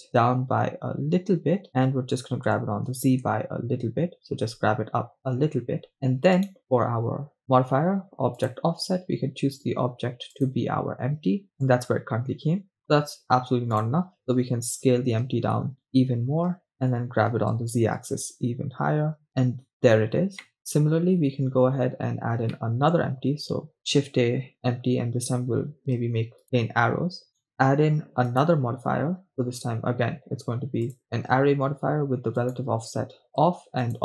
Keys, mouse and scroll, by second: 1.7 shift+click, 2.7 g, 3.2 z, 5.3 shift+click, 6.7 right click, 8.4 click, 10.3-11.8 drag, 11.8 middle click, 14.2 click, 15.0 s, 16.7 click, 17.9 g, 18.3 z, 19.7 click, 19.7 middle click, 20.4 middle click, 20.9-22.0 scroll down 2, 22.9 shift+middle click, 23.8 shift+a, 27.3 click, 27.3 right click, 28.3-31.5 drag, 31.5-32.4 scroll down 4, 33.0 click, 33.9-34.0 drag.